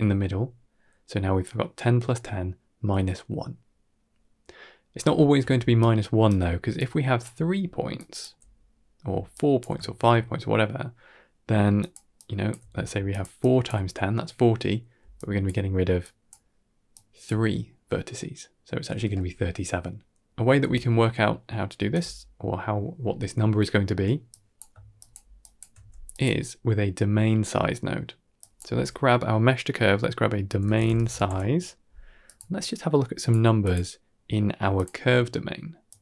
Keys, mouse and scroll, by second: 5.0 shift+middle click, 5.4-9.5 typing, 5.7 right click, 6.6 click, 7.8 click, 9.2 click, 9.7-10.8 shift+middle drag, 11.4-13.6 typing, 11.7 click, 12.1 click, 13.0 click, 13.3 click, 14.8 d, 15.0 click, 15.4-15.9 d, 15.9 click, 16.2-16.6 d, 16.8 d, 16.8 click, 18.9 d, 20.5 d, 20.6-21.8 drag, 20.6 right click, 21.8 d, 22.1 middle click, 22.1 d, 23.3 scroll down 2, 23.5 middle click, 24.2 click, 25.3 shift+drag, 25.7 g, 27.0-27.5 scroll up 5, 27.5 middle drag, 28.3-32.2 drag, 33.1 click, 33.5-34.7 drag, 35.8 click.